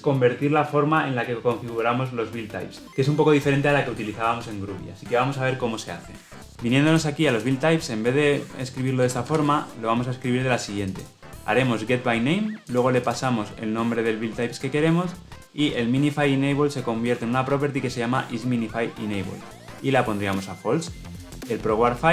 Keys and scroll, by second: 9.2 ctrl+v.